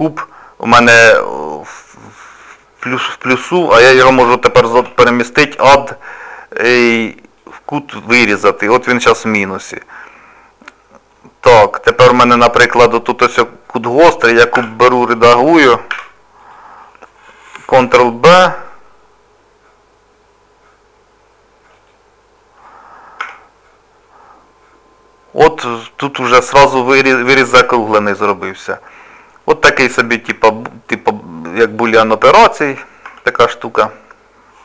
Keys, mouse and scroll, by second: 8.6 middle click, 10.2-10.6 scroll up 1, 10.6 middle click, 16.1 2, 16.4 click, 18.0 ctrl+b, 24.3 scroll down 2, 24.8 scroll up 2, 25.3 middle click, 27.0 middle click, 28.0 scroll down 2, 28.0 scroll up 1, 28.7 scroll down 1, 29.4 middle click, 29.4 scroll down 1, 30.5 shift+middle click, 30.9 scroll up 1, 31.7 click, 32.4 Tab.